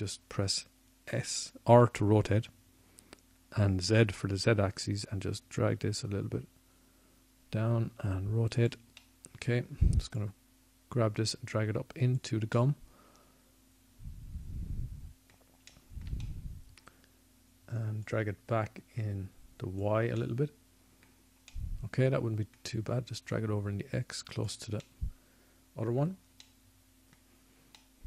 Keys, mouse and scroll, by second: 2.4-5.0 middle drag, 6.8 r, 14.2-16.2 drag, 17.5 scroll down 1, 17.7 middle click, 18.6 middle click, 18.8 middle click, 19.2 middle click, 20.8 middle click, 21.4-23.1 middle drag, 25.3 middle click.